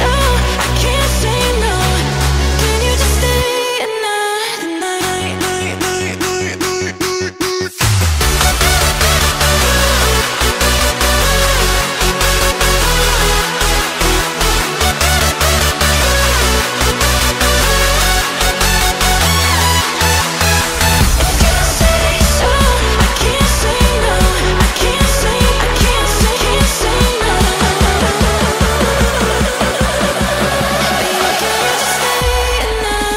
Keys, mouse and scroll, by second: 0.4 click, 1.0-1.4 shift+middle drag, 1.4-1.8 scroll up 2, 1.8-2.4 shift+middle drag, 2.4 click, 2.8 Tab, 3.3 click, 3.8 click, 4.7 l, 5.0-5.4 scroll up 1, 5.4 shift+middle click, 6.2 g, 7.8 click, 8.2 g, 10.3 click, 10.9 middle click, 11.6 scroll up 1, 11.7 scroll down 2, 11.9 middle click, 12.3-12.7 scroll down 1, 12.7 shift+middle click, 13.2 click, 14.0 l, 14.5-16.0 shift+middle drag, 16.0 g, 16.9 g, 18.5 scroll down 1, 18.7-19.9 middle drag, 19.9 click, 20.9 l, 23.0 shift+middle click, 23.7 click, 24.7 l, 27.6-29.1 shift+middle drag, 29.1 click, 29.4-30.5 middle drag, 30.5 l, 33.0 g.